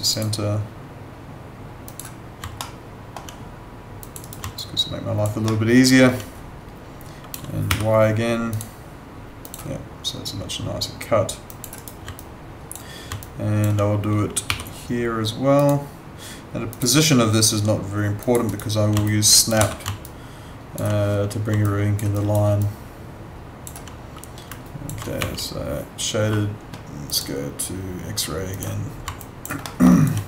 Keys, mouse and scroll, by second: 2.6 alt+middle click, 4.0 click, 4.2 right click, 4.6 alt+click, 5.4 alt+middle click, 7.7 y, 8.5 click, 11.8 right click, 12.1 alt+click, 13.2 alt+click, 14.5 y, 15.6 click, 18.5 right click, 19.0 alt+click, 19.5 w, 20.1 alt+click, 21.6 alt+click, 22.1 alt+right click, 22.6 alt+click, 24.7 alt+click, 24.9-25.7 typing, 27.1 click, 29.2 alt+click, 29.6 alt+middle click, 29.9 alt+right click.